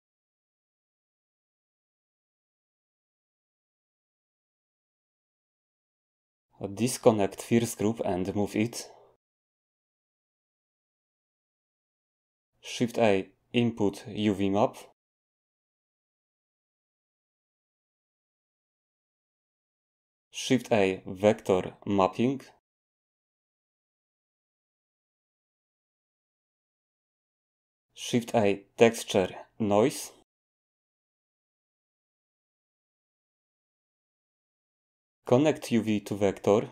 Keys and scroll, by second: 0.0-1.0 typing, 12.8 a, 20.6 a, 27.9 a.